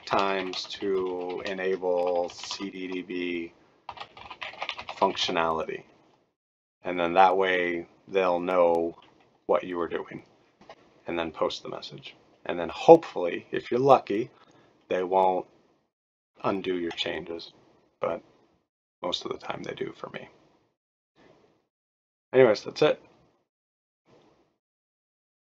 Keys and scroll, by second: 0.0-5.7 typing, 2.5 shift+scroll up 2, 5.5 scroll up 1.